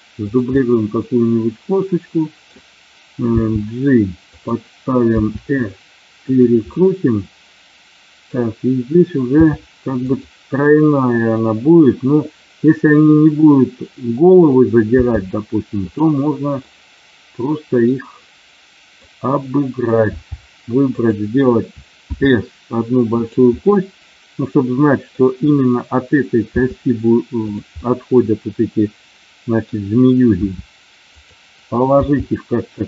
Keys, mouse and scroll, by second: 0.3 click, 0.5-2.5 middle drag, 3.3 g, 5.1 r, 6.1 click, 6.7-8.2 middle drag, 9.4 r, 10.0 click, 14.9 g, 16.6-19.0 middle drag, 20.2 g, 20.9 click, 22.0 s, 23.0 click, 23.6-25.2 middle drag, 26.5 s, 27.4 click, 27.9-29.6 middle drag, 30.3 r, 31.0 click, 31.9 g.